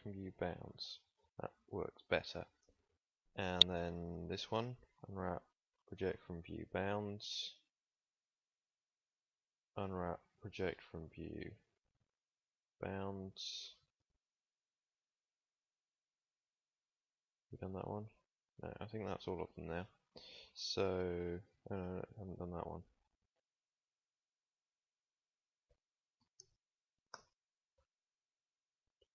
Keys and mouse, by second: 4.8 u, 7.6 KP_3, 9.7 u, 12.0 u, 14.9 KP_3, 16.0 KP_1, 16.9 u, 23.9 KP_1, 24.9 KP_3, 26.1 u.